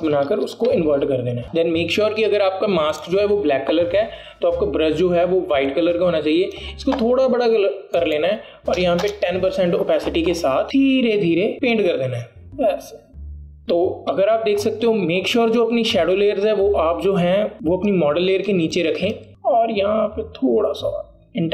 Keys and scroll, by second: 1.4 ctrl+i, 9.9 KP_1, 10.1 Return.